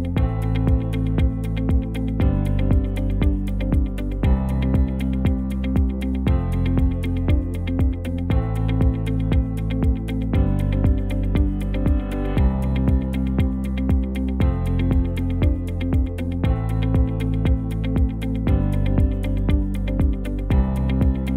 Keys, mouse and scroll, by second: 15.2 click.